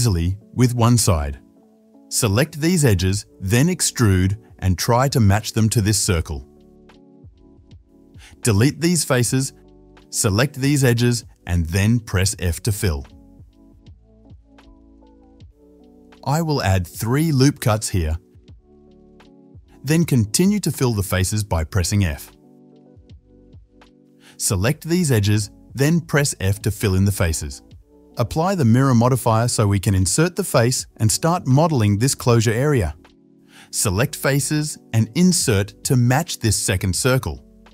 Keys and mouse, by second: 2.3-3.3 middle drag, 3.1 1, 3.3-6.6 drag, 6.5-9.2 typing, 6.6 middle click, 7.0 click, 7.4 middle click, 8.1 shift+click, 8.5 middle click, 8.8 click, 10.6 2, 11.2 click, 11.8-13.7 middle drag, 12.4 f, 13.7 click, 13.8-20.5 middle drag, 14.0 f, 14.3 f, 14.9 ctrl+z, 15.9 f, 17.5 ctrl+r, 20.2 ctrl+z, 20.2 f, 20.5 click, 20.6 shift+middle click, 21.0 shift+click, 21.0 shift+middle click, 21.4 shift+click, 21.4 shift+middle click, 21.8 f, 22.3 click, 22.5-23.9 middle drag, 22.8 f, 23.1 f, 23.5 f, 23.9 click, 23.9 3, 24.5-26.3 middle drag, 25.1 2, 26.3 alt+shift+click, 26.3 alt+shift+middle click, 26.4-28.2 alt+shift+middle drag, 27.1 f, 28.2-29.0 drag, 28.6 Tab, 32.3 KP_7, 33.7 Tab, 34.6 shift+z, 35.0-37.7 middle drag, 35.0 i, 35.2 i.